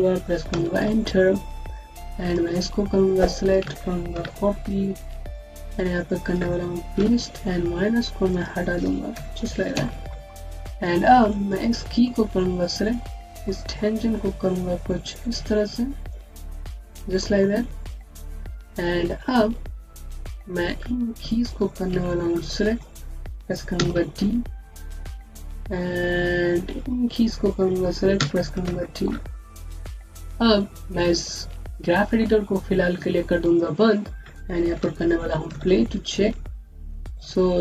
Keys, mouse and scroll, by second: 0.4 KP_Enter, 1.6 click, 4.0 ctrl+c, 4.9 click, 6.8 ctrl+v, 8.2 click, 9.0 BackSpace, 9.6 KP_Enter, 10.3-11.1 scroll up 1, 11.1 click, 11.9 alt+middle click, 12.7 click, 13.3 middle click, 17.7 click, 18.1-18.6 scroll down 1, 18.6-19.8 scroll up 1, 19.8 click, 23.6-23.9 typing, 24.7-25.2 scroll down 1, 25.2 click, 28.0-28.6 typing, 29.3 click, 29.6-31.2 scroll up 1, 33.3 scroll up 1, 33.5 click, 34.0-34.7 scroll down 1, 35.4 alt+v.